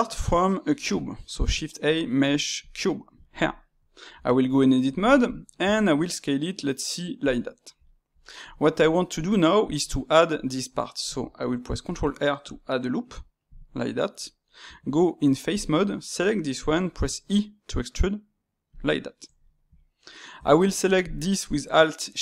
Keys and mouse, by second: 1.3 shift+a, 3.2-4.1 ctrl+middle drag, 4.1 Tab, 4.4-5.6 middle drag, 5.6 s, 7.4-11.5 middle drag, 13.7 middle click, 14.6 Tab, 15.5 click, 16.9 e, 18.9-20.3 middle drag, 20.3 Tab, 20.9 alt+click.